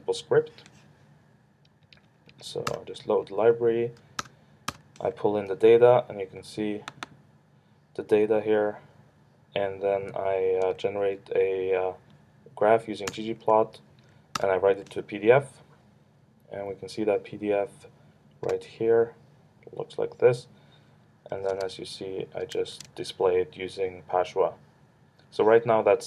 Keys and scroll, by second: 1.6 Up, 2.7 ctrl+Return, 3.2 Down, 4.2 ctrl+Return, 7.0 ctrl+Return, 13.1 ctrl+Return, 13.9 Down, 14.4 ctrl+Return, 21.5 super+Tab.